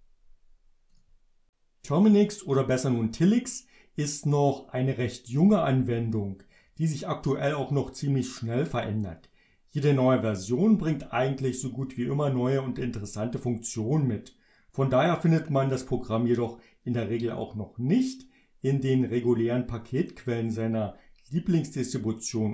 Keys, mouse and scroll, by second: 1.0 click.